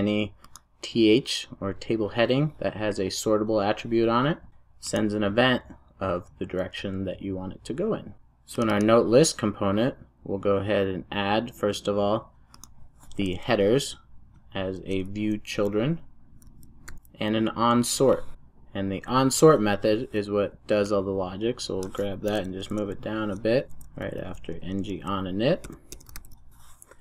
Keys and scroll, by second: 14.7 Tab, 16.9 Return, 18.3 alt+Return, 22.3 super+x, 26.2 super+v.